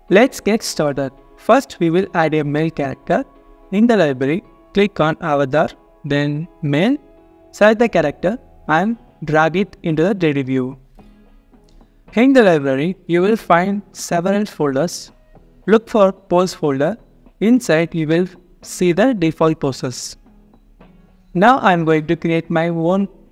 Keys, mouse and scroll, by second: 5.8 double click, 11.7-12.1 scroll down 1, 16.3 double click, 20.6 scroll down 1, 21.4 alt+click, 22.1 alt+middle click, 22.6 scroll up 1.